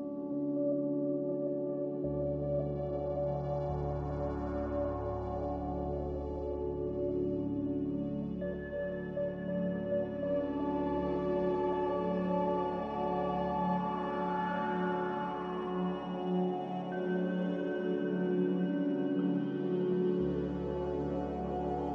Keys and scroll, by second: 4.4 z, 18.0 1, 18.1 0, 18.4 Return.